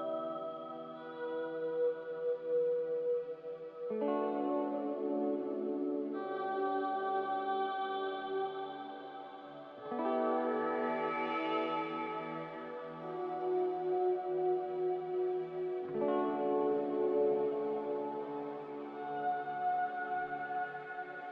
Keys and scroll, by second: 0.2 3, 2.6 2, 4.0 m, 10.0 a.